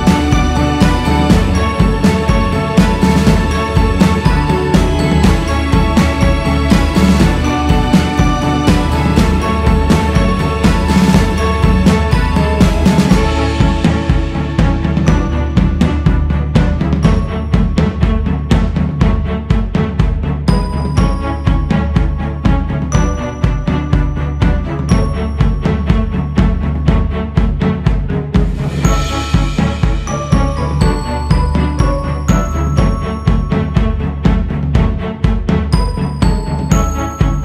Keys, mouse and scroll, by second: 16.8-17.7 scroll down 2, 17.7 click, 18.7 click, 19.8 click, 21.3-21.8 scroll up 1, 21.8-22.8 scroll down 3, 22.8 click, 24.1-25.1 scroll up 4, 25.4-26.4 scroll up 1, 26.4-29.5 drag, 30.5-33.5 drag.